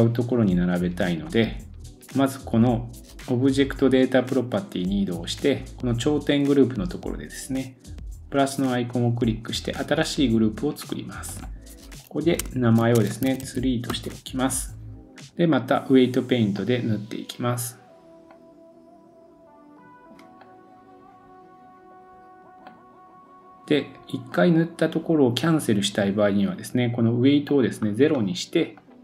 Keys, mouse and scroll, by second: 1.2 click, 3.4-7.7 middle drag, 8.0-11.3 drag, 11.4-29.0 drag, 13.4 e, 15.5-16.6 scroll up 2.